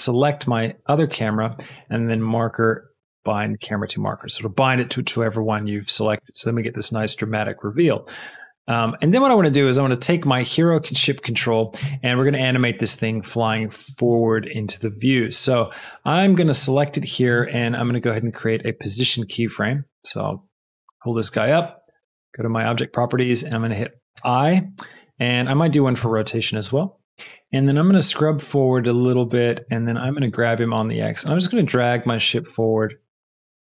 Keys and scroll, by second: 30.0 g, 30.1 x.